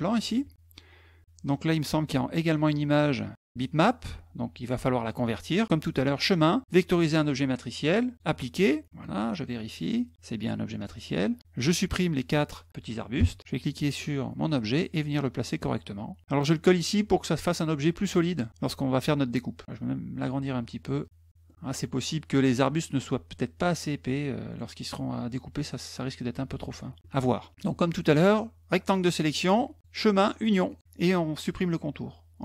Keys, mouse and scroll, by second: 1.6 click, 5.7 click, 8.1 click, 9.6 click, 10.7 click, 10.9 click, 11.4 click, 13.8-16.2 drag, 17.2 click, 17.9 click, 19.6 ctrl+click, 20.8 ctrl+click, 21.3 middle click, 21.6 middle click, 24.0 middle click, 27.2 middle click, 28.2 click, 30.5 click.